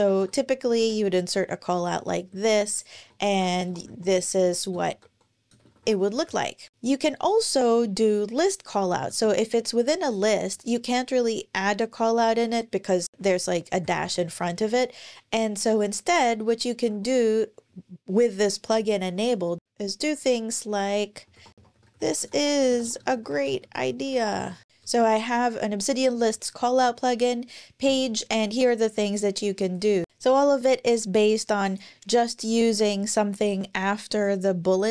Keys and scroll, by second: 0.0-0.6 typing, 0.6 Return, 2.1 super+Right, 2.7 alt+shift+Left, 3.0-6.4 typing, 6.7 Return, 8.8 typing, 13.1 Left, 13.2 Left, 13.6 Right, 13.8 Right, 16.7 [, 19.6 Left, 19.6 BackSpace, 21.5 super+Right, 21.5-25.2 typing.